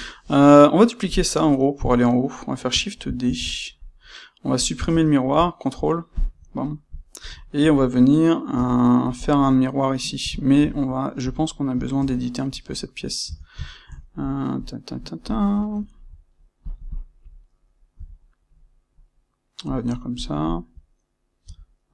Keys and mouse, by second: 1.8 click, 3.2 shift+d, 4.6 click, 4.8 space, 6.5-8.5 middle drag, 8.5 c, 9.2-9.9 drag, 9.9-13.1 middle drag, 13.1 Tab, 13.6-16.6 ctrl+middle drag, 16.6 click, 16.8 shift+click, 19.7 click, 20.4 shift+click.